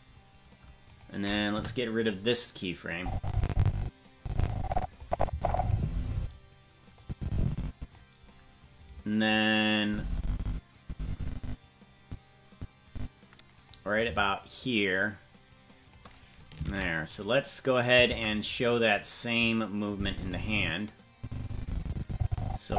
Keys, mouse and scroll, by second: 0.9 right click, 1.5 Delete, 2.9-4.8 drag, 5.0 click, 5.3 space, 6.1 space, 7.0-8.0 drag, 9.8-13.7 drag, 15.0-16.0 drag, 16.6 ctrl+Tab, 17.2 right click, 18.1 ctrl+Tab, 18.7 right click, 19.9-22.7 drag.